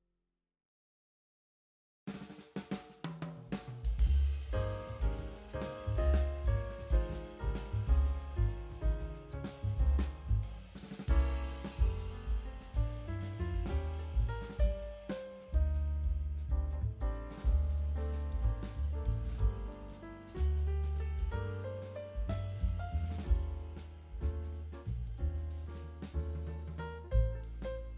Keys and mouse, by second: 0.1 middle click, 0.2 click, 0.4 click, 0.7 click, 1.1 click, 1.2 click, 1.5 middle click, 1.6 click, 1.8 middle click, 2.0 click, 2.3 click, 2.5 middle click, 2.8 click, 3.1 click, 3.5 middle click, 3.6 middle click, 3.8 click, 4.0 middle click, 4.3 click, 4.6 click, 4.8 middle click, 4.9 click, 5.1 click, 5.5 middle click, 5.6 click, 6.0 click, 6.1 click, 6.2 click, 6.5 click, 6.8 click, 6.9 middle click, 7.0 click, 7.3 middle click, 7.6 click, 7.8 click, 8.1 click, 8.3 click, 9.0 click, 9.3 click, 9.5 middle click, 9.6 click, 10.1 middle click, 10.3 middle click, 11.1 click, 11.3 click, 11.6 click, 11.7 middle click, 11.9 click, 12.1 middle click, 12.2 click, 12.4 middle click, 12.6 click, 12.8 click, 12.9 middle click, 13.2 click, 13.4 middle click, 13.7 click, 14.0 click, 14.3 middle click, 14.4 click, 14.8 middle click, 15.2 middle click, 16.5 middle click, 17.2 click, 17.5 click, 18.5 middle click, 18.8 middle click, 19.2 click, 19.6 click, 19.9 click, 20.1 ctrl+z, 20.2 ctrl+z, 20.4 ctrl+z, 20.5 click, 20.8 click, 21.1 middle click, 21.2 click, 21.4 click, 21.8 middle click, 22.0 click, 22.1 click, 22.2 middle click, 22.4 click, 22.6 middle click, 22.8 click, 23.1 middle click, 23.2 click, 23.4 click, 23.5 middle click, 24.0 middle click, 24.2 middle click, 24.7 click, 25.2 g, 25.9 click, 26.0 f, 26.3 click, 26.6 ctrl+z, 26.8 ctrl+z, 27.0 click, 27.7 click, 27.9 click.